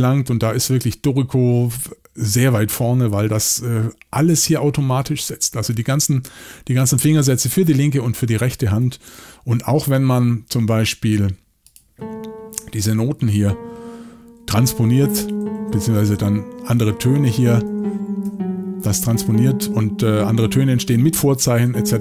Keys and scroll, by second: 9.2-9.6 typing, 13.3 alt+shift+Up, 14.4 alt+shift+Down, 14.9 alt+shift+Down, 15.3 alt+shift+Up, 15.6 alt+shift+Up, 16.1 alt+shift+Up, 16.7 alt+shift+Down, 16.9 alt+shift+Down, 17.3 alt+shift+Down, 17.7 alt+shift+Down, 18.3 alt+shift+Down, 19.0 alt+shift+Up, 19.2 alt+shift+Up, 20.0 alt+shift+Down, 21.6 alt+shift+Up.